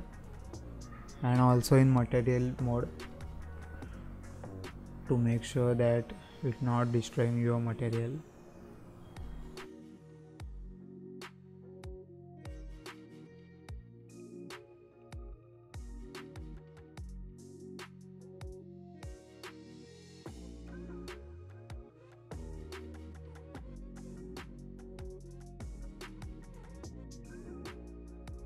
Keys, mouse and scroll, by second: 0.0-0.4 scroll up 1, 0.4 middle click, 0.8-1.3 scroll up 2, 1.3-1.9 middle drag, 1.9-2.3 scroll down 1, 2.3 z, 3.2-3.6 scroll up 3, 3.7 scroll down 1, 6.2 click, 16.3 click, 16.8-17.3 scroll down 2, 17.3-17.7 scroll up 2, 17.7 z, 18.7-19.4 scroll down 2, 19.4-20.1 scroll up 3, 20.3-21.0 scroll down 1, 21.0 scroll down 1, 21.2-28.4 drag.